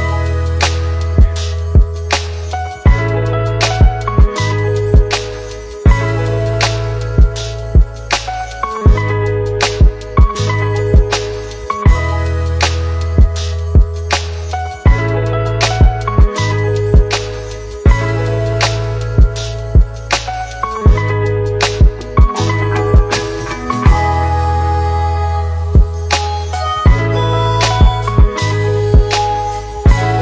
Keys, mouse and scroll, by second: 0.8 click, 3.1-6.8 click, 13.4 Up, 15.8 click, 23.9-26.1 typing, 27.7 click.